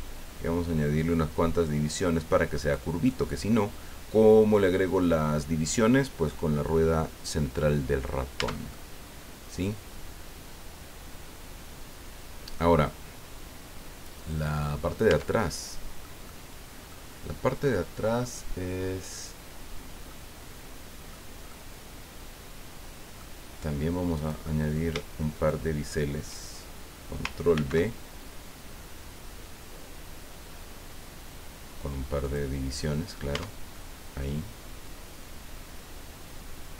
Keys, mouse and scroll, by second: 2.6 click, 3.0-5.2 drag, 8.4 Tab, 8.7-12.8 drag, 12.8-15.1 drag, 15.1 Tab, 15.4 click, 16.2 click, 20.1-21.3 drag, 21.5-23.4 drag, 24.1 right click, 25.3 shift+right click, 27.5 ctrl+b, 30.4-31.1 scroll up 2, 31.3 scroll up 2, 32.2 click, 33.3 Tab, 33.7-36.7 drag.